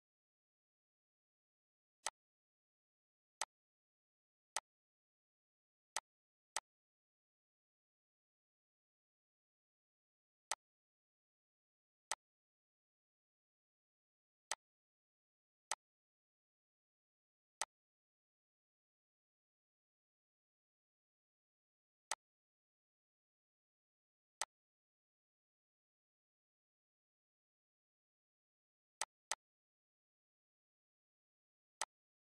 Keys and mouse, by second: 3.2 click, 5.3 click, 7.6 click, 11.1 click, 13.3 ctrl+z, 15.3 click, 16.0 click, 17.9 click, 21.8 click, 23.9 click, 27.7 click, 31.0 click.